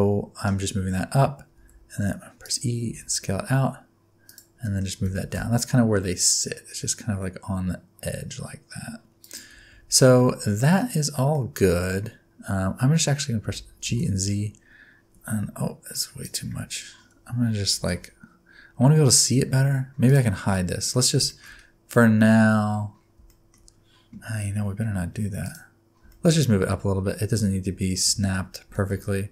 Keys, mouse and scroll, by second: 0.8-1.6 scroll up 1, 1.6 e, 2.9 s, 4.6 middle click, 5.0 g, 9.7 Tab, 10.0 scroll down 1, 10.2 middle click, 10.8 scroll down 2, 11.1 scroll up 1, 11.3 middle click, 11.8 scroll down 2, 12.0-13.0 scroll up 3, 13.0 scroll down 3, 13.4 g, 16.5-17.7 scroll down 2, 17.7 KP_1, 18.8-19.6 scroll up 3, 20.1 click, 20.5 middle click, 20.8-21.3 scroll down 5, 21.3 shift+middle click, 21.9 scroll down 1, 22.0 middle click, 22.6-23.2 scroll up 8, 23.3 shift+middle click, 25.4 click, 26.1 shift+middle click, 27.3 Tab, 28.0 Tab, 28.7 g.